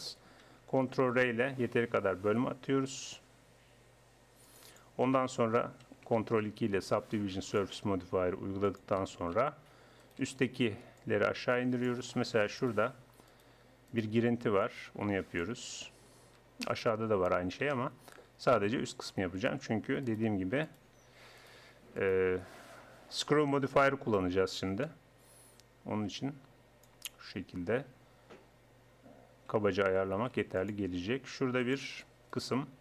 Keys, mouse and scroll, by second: 1.0 ctrl+r, 6.2 ctrl+2, 9.1 a, 12.9 right click, 16.2 click, 16.7-17.7 right drag, 17.7 middle click, 20.1-23.6 right drag, 23.6 middle click, 24.9-26.7 drag, 30.1 ctrl+r, 32.3-32.8 drag.